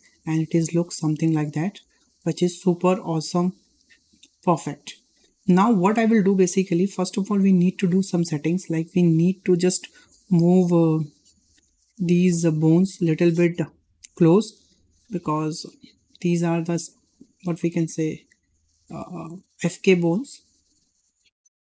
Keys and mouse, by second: 0.7 `, 1.8 shift+middle click, 2.4 shift+middle drag, 5.5-5.8 shift+middle drag, 6.2 shift+middle drag, 7.5 middle click, 7.9 shift+middle click, 9.4-9.9 middle drag, 10.1 shift+middle drag, 11.6 Tab, 12.4 click, 14.1 click, 15.9-17.2 drag, 17.8 click, 18.7 click, 20.0 click, 20.9 drag.